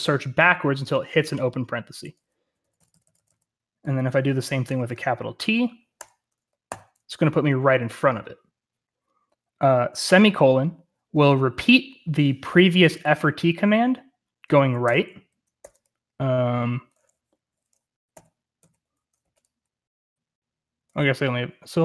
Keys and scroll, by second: 2.1-3.2 typing, 5.9-6.6 typing, 15.5 typing, 18.0-19.1 typing.